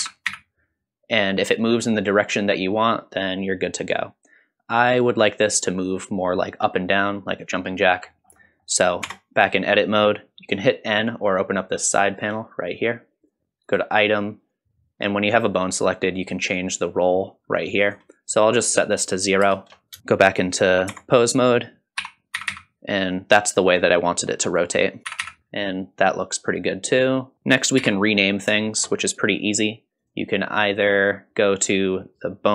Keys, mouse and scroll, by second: 8.2 scroll down 2, 8.5 middle click, 9.0 Tab, 9.7-12.1 scroll up 1, 12.1-13.3 drag, 13.7 click, 16.5-17.9 drag, 18.8-20.0 drag, 20.0 shift+middle click, 20.9 Tab, 22.0 r, 25.0 click, 25.0 r, 27.0 middle click, 27.8 n, 28.1-28.5 scroll down 2, 28.6 shift+middle drag, 30.0 click.